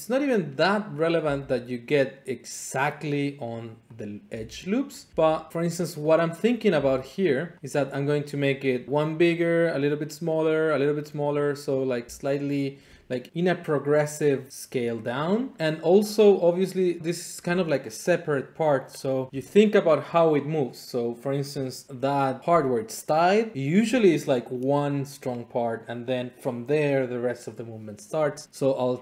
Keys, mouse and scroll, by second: 1.0 click, 1.2 e, 2.9 click, 3.9 click, 4.4 g, 5.0 click, 5.1 click, 6.0 click, 6.5 click, 6.8 g, 7.6 click, 7.7 click, 11.9 click, 12.1 g, 12.3 click.